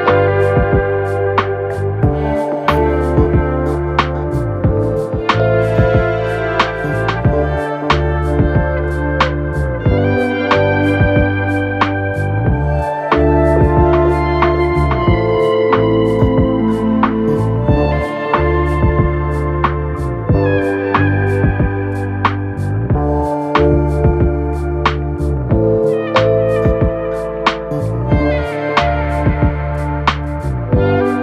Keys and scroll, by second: 0.5 Escape, 1.9 [, 2.3 ], 7.4 ctrl+z, 10.8-14.6 typing, 17.2 ctrl+d, 17.3 Escape, 27.2 2, 27.6 ], 28.9 4, 30.1 2, 30.3 ].